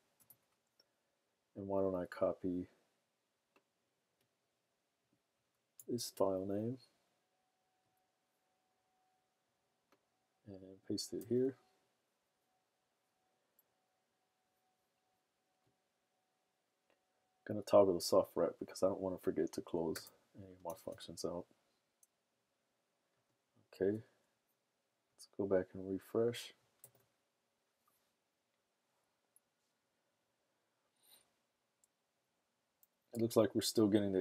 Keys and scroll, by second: 0.0-0.1 typing, 5.8 super+c, 11.2 super+v, 20.7 super+s, 27.0 super+r.